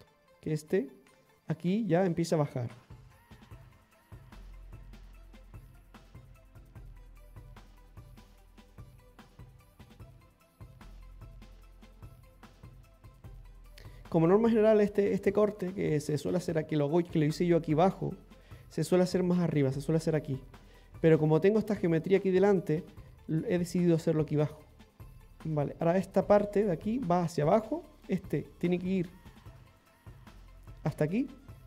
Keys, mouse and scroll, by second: 0.8 middle click, 1.9 click, 4.0 click, 5.2 middle click, 6.2 click, 9.1 click, 10.4 middle click, 11.4 click, 13.7 middle click, 13.7 scroll down 2, 24.7 middle click, 25.1 middle click, 25.1 scroll up 2, 27.9 middle click, 28.7 scroll down 2, 29.0 shift+middle click, 29.8 middle click.